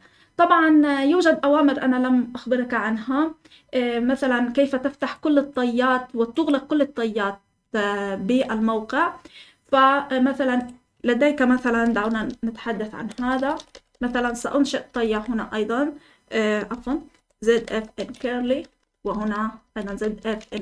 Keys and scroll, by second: 11.7 Escape, 11.8-15.5 typing, 16.7 Escape, 16.9 Escape, 16.9-20.6 typing.